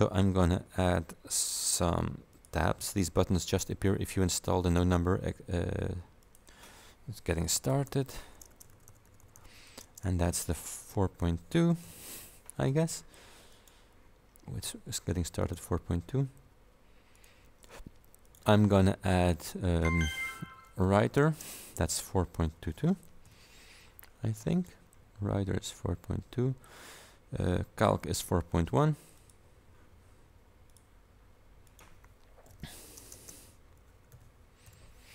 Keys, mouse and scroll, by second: 2.4 click, 6.3 click, 7.4-11.9 typing, 13.6 click, 15.5 click, 17.2 click, 18.3 click, 20.3-23.3 typing, 24.6 click, 29.3 click, 30.8 click, 31.7 click, 32.4-34.7 typing.